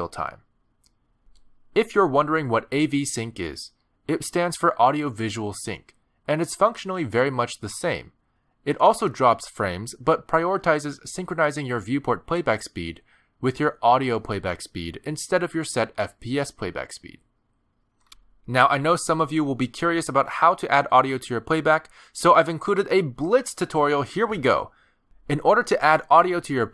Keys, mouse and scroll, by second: 5.4 click.